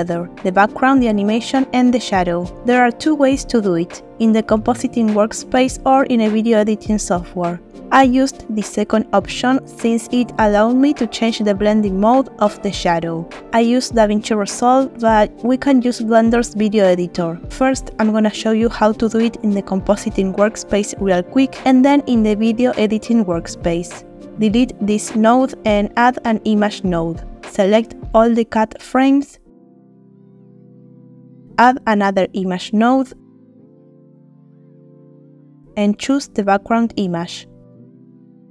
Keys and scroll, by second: 24.3 Delete, 24.7 shift+a, 25.5 m, 31.9 shift+a, 33.0 i, 33.3 m.